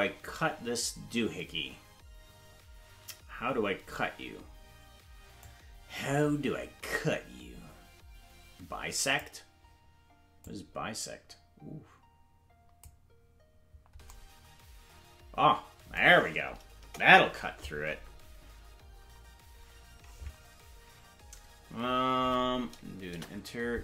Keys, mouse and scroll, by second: 5.4-9.2 drag, 10.4-12.8 drag, 16.8 KP_0, 23.1 Return.